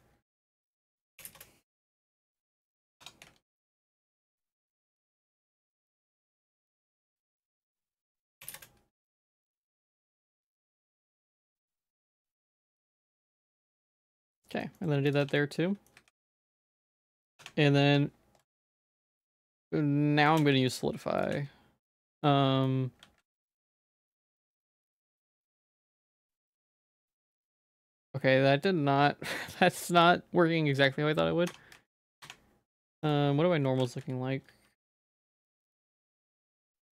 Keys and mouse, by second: 0.5 s, 1.8 g, 3.0 Tab, 3.3 z, 3.6 middle click, 4.4 middle click, 5.2 middle click, 5.6 shift+middle click, 6.0 ctrl+z, 6.2 ctrl+z, 6.4 ctrl+z, 6.6 ctrl+z, 7.2 middle click, 7.5 s, 10.0 middle click, 10.3 middle click, 10.7 middle click, 10.9 g, 12.7 Tab, 13.2 middle click, 13.7 ctrl+s, 13.9 shift+middle click, 14.4 middle click, 14.8 shift+middle click, 15.2 Tab, 15.4 middle click, 16.0 a, 16.3 Tab, 16.7 middle click, 17.2 ctrl+s, 17.4 Tab, 17.9 Tab, 18.6 ctrl+s, 19.0 click, 20.4 ctrl+z, 20.8-21.9 drag, 22.2 middle click, 23.1 ctrl+s, 24.1 Tab, 24.3 a, 24.5 q, 25.3 Tab, 25.8 ctrl+s, 26.4-30.0 drag, 31.5 Tab, 32.2 Tab, 32.2 a, 33.1 click, 33.7 ctrl+s, 35.5-36.6 drag.